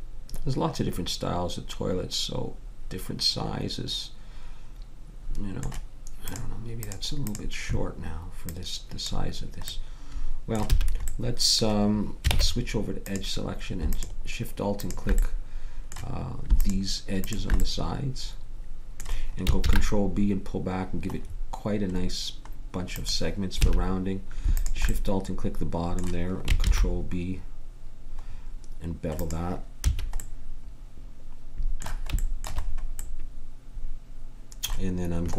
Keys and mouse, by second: 6.2-10.2 drag, 10.7 a, 12.3 ctrl+Tab, 18.0-19.6 middle drag, 19.6 ctrl+b, 23.5 a, 24.5 click, 26.6 ctrl+b, 29.8 a.